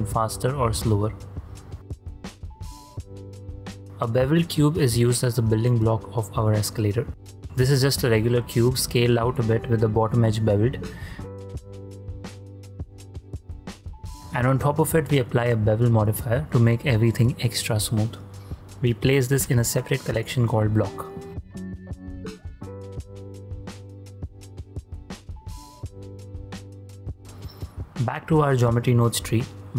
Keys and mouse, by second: 0.8 click, 3.8 click, 4.1 shift+s, 5.1 click, 7.4 typing, 8.6-10.0 drag, 10.4 2, 10.8 click, 11.6 ctrl+b, 14.2 alt+z, 14.2 click, 15.9 shift+click, 17.6 shift+middle click, 18.5 x, 18.7 click, 19.8 click, 21.1 click, 22.7 click, 23.6-24.3 ctrl+drag, 24.8 x, 25.5 click, 27.0 ctrl+click, 27.3 middle click, 28.0 click, 28.5 shift+a.